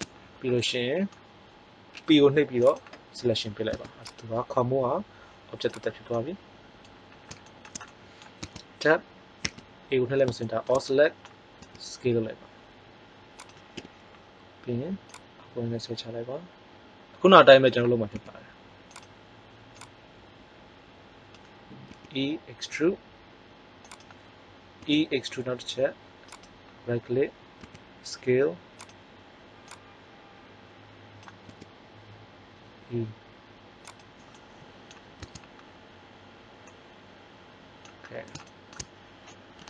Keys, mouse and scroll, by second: 0.0 middle click, 0.1 right click, 0.2 middle click, 1.9 p, 3.7 Tab, 4.0-4.5 right drag, 4.7 g, 8.3 Tab, 9.4 a, 11.5 s, 13.7 KP_3, 18.1 s, 19.6 click, 21.9 e, 24.7 e, 26.4 click, 27.5 s, 28.8-31.0 drag, 31.4 e, 34.2 click, 35.1 Tab.